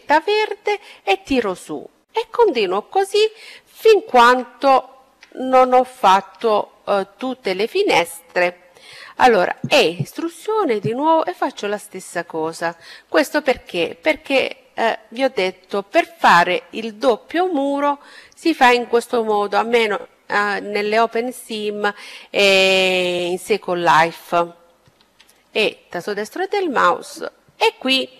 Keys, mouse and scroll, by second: 4.7-6.4 middle drag, 7.9 e, 9.4-11.2 drag, 12.1-14.5 middle drag, 14.5 e, 15.7-17.7 drag, 18.5-21.1 middle drag, 23.8 e, 25.3-27.1 drag.